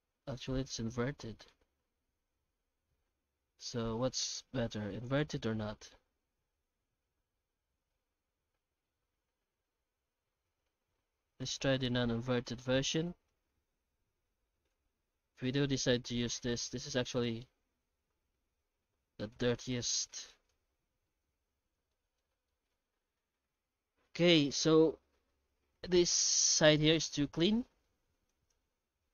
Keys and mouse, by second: 5.8-11.5 shift+drag, 12.1-13.0 middle drag, 14.7 click, 16.1-18.3 middle drag, 19.3-20.5 drag, 21.2 alt+h, 21.7 alt+a, 21.9-22.3 middle drag, 22.5 shift+middle drag, 23.1-23.5 middle drag, 26.5 middle click, 27.0-27.7 right drag, 27.7 middle click, 28.3 right click.